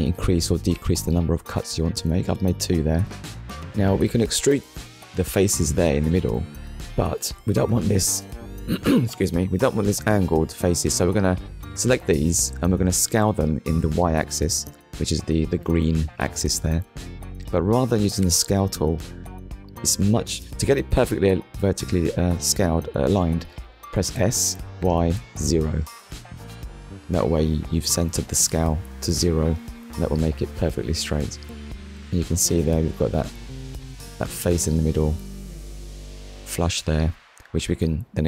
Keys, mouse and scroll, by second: 2.3 click, 3.4-3.8 scroll up 2, 5.4 click, 6.1 click, 6.7 click, 10.8 click, 12.1 click, 14.4 ctrl+z, 15.4 click, 20.8 0, 21.6 Return, 22.4 click, 22.9 click, 25.3 0, 25.9 Return, 27.2 click, 28.6 click, 29.3 middle click, 30.2 scroll down 1, 31.7 click, 32.5 middle click, 34.5 scroll down 1, 34.9 shift+middle click, 35.3 middle click, 36.8 click, 37.3 middle click.